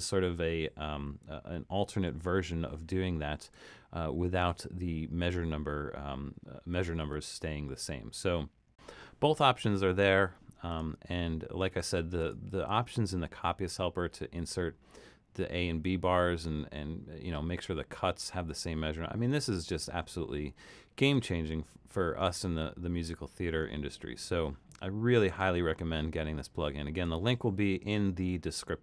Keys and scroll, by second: 2.1 super+z.